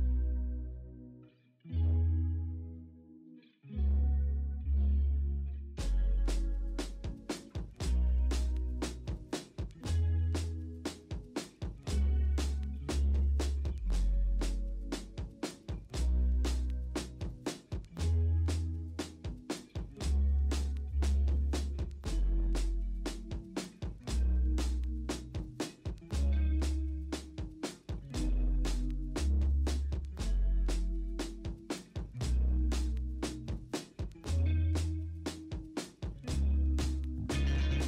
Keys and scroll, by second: 0.5 ctrl+u, 7.5-8.6 typing, 9.3 ctrl+d, 9.8-12.1 typing, 10.7 ctrl+d, 13.1 ctrl+d, 13.4-15.2 typing, 14.9 ctrl+z, 15.6 ctrl+d, 16.9 v, 18.4 ctrl+a, 18.5 ctrl+c, 19.7 ctrl+v, 21.1 v, 23.3 typing, 24.2 ctrl+shift+i, 24.3 alt+BackSpace, 24.6 ctrl+d, 25.0 v, 25.9 ctrl+t, 27.1 v, 31.7 ctrl+i, 31.9 b, 33.4 x, 34.8 x, 36.2 3, 36.9 x.